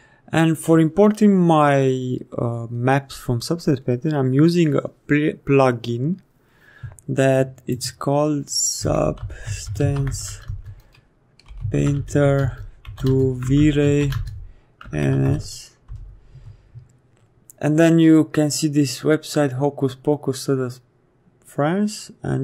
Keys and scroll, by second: 8.7-15.2 typing, 15.8 Return, 16.3 Caps_Lock.